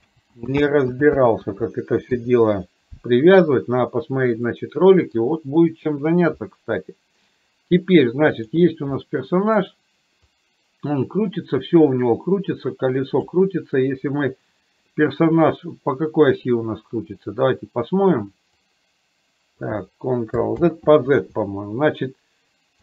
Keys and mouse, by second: 0.3 ctrl+z, 1.3 ctrl+z, 2.1 KP_3, 4.5-5.3 middle drag, 8.4 click, 9.0 middle click, 10.3-13.4 drag, 18.6-19.8 drag, 20.6 ctrl+z.